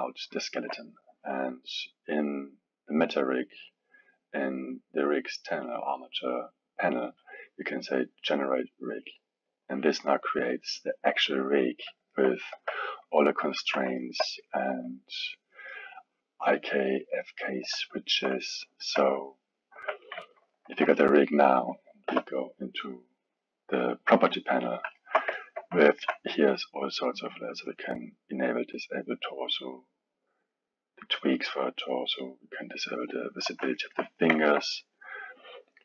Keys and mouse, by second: 3.1 click, 4.7 click, 9.1-11.6 drag, 11.6-12.5 middle drag, 12.5 KP_1, 13.2-17.3 middle drag, 17.3 click, 18.0-18.8 alt+middle drag, 18.8 drag, 19.3-19.8 middle drag, 19.8 KP_1, 21.4-22.1 drag, 22.1 n, 25.0-27.7 alt+middle drag, 27.7 click, 30.5 click, 31.4 click, 31.9-32.7 drag, 33.8-34.9 alt+middle drag, 34.9 drag, 35.4 click.